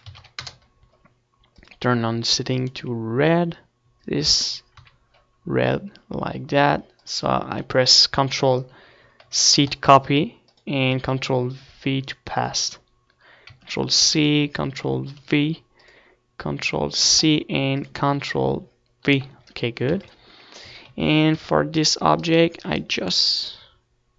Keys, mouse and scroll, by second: 7.5 click, 9.7 z, 16.6-24.1 drag.